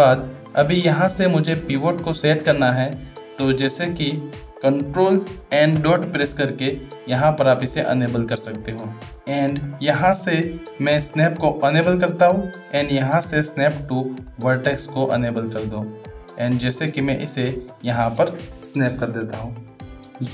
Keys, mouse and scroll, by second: 0.5 middle drag, 1.3 middle click, 2.5 shift+middle drag, 5.7 ctrl+., 8.1-8.6 middle drag, 9.6 shift+middle click, 11.0 click, 12.1-14.8 drag, 16.1-17.7 drag, 20.1 shift+middle click.